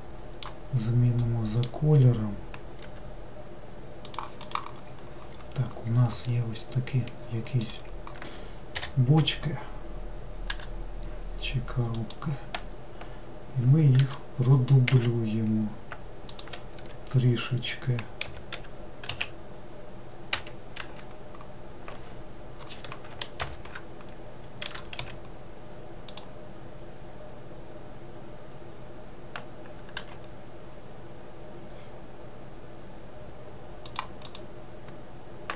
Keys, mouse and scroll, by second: 2.9 g, 4.5 click, 4.9-6.3 scroll down 1, 6.3-7.7 middle drag, 7.7 click, 10.6 g, 14.1 shift+d, 16.9 e, 23.5 ctrl+l, 24.7 r, 30.0 g, 34.3 click.